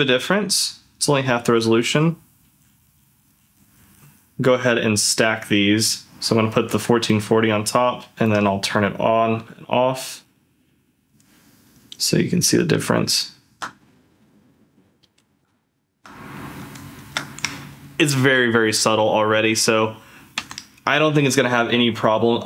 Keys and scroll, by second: 0.4-1.5 Left, 1.9 Left, 2.4 Left, 2.7 Left, 2.9 Left, 3.0 Left, 3.3 Left, 3.5 Left, 3.6 Left, 3.8 Left, 4.1 Left, 4.3 ctrl+f, 8.7 d, 9.3 d, 10.0 ctrl+f, 12.3 ctrl+z, 13.2 ctrl+shift+z, 15.0 ctrl+z, 15.8 ctrl+shift+z, 16.4 ctrl+z, 17.0 ctrl+shift+z, 20.4 ctrl+f.